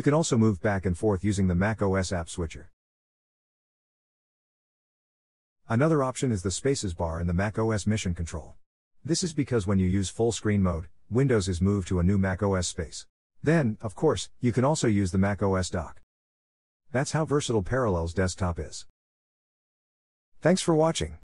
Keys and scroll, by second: 0.1 super+Tab, 3.2 super+Tab, 6.4 ctrl+Up.